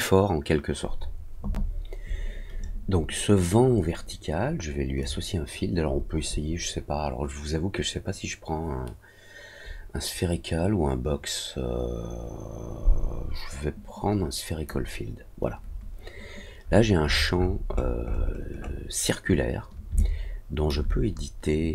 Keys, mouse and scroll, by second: 4.9-14.6 drag, 16.5-17.2 scroll up 2, 17.3 scroll down 1, 17.4-18.7 scroll up 4, 19.9 alt+click.